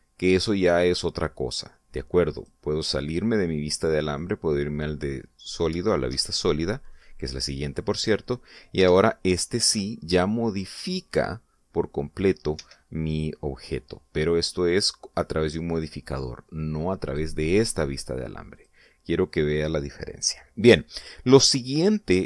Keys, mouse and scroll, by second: 0.3 click, 3.2 click, 5.1 click, 5.7 middle click, 6.5 scroll down 1, 6.6 shift+middle click, 7.4-7.9 middle drag, 8.9 scroll up 2, 9.7 F12, 13.4 Escape, 16.6 click, 17.9 click, 19.4 click.